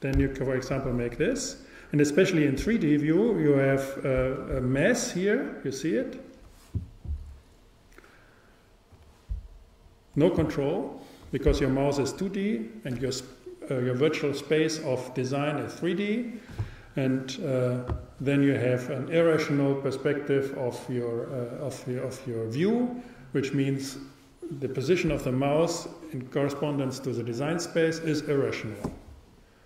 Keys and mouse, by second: 0.2 g, 4.3-6.3 drag.